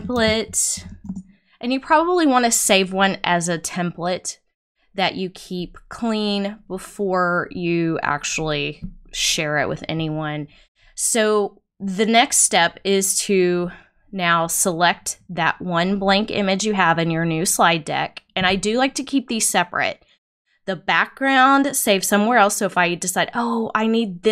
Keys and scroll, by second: 0.0-0.4 typing, 1.0 Return.